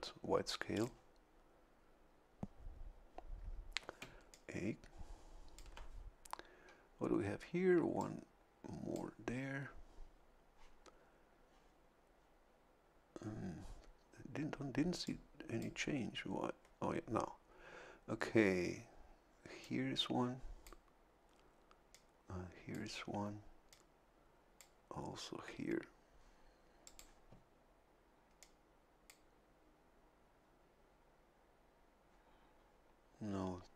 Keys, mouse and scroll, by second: 0.7 click, 4.0 a, 4.3-5.8 drag, 8.0-9.1 drag, 15.0 click, 19.6-20.8 drag, 21.9-22.9 drag, 23.7-24.8 drag, 26.8 click, 28.4 click.